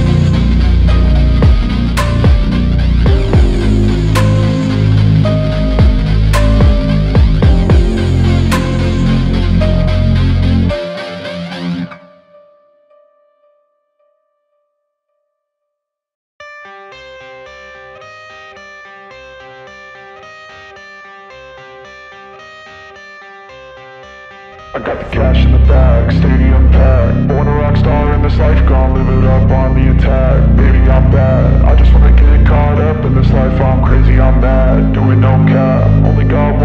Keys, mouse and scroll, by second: 0.0 right click, 0.8-1.7 scroll down 1, 1.7-2.5 scroll up 1, 2.6 alt+middle click, 4.2 scroll down 1, 4.8 alt+click, 6.8 alt+click, 8.2-8.7 scroll down 1, 8.7 alt+click, 9.7-10.4 scroll down 1, 10.4 alt+middle click, 11.9 scroll up 1, 12.3 alt+middle click, 12.7-13.9 scroll up 1, 15.4 typing, 16.5 right click, 18.5-19.4 typing, 21.3 right click, 23.1-23.5 scroll up 1, 23.5 scroll down 1, 23.8 alt+middle click, 24.1-25.0 alt+scroll up 2, 25.6 z, 26.1-26.5 scroll down 1, 26.5 z, 26.7-27.2 scroll down 1, 27.2 scroll up 1, 27.7 right click, 29.6 right click, 31.0-31.4 scroll up 1, 31.4 right click.